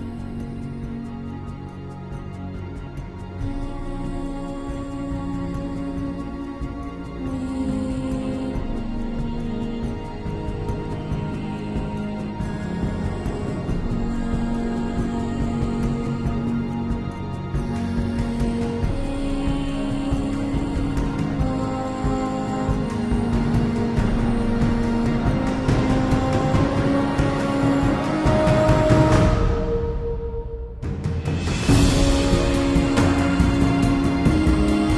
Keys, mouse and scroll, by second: 4.0 click, 4.7 click, 6.4 click, 6.9 click, 9.9 click, 10.7 click, 11.8 click, 13.4 super+z.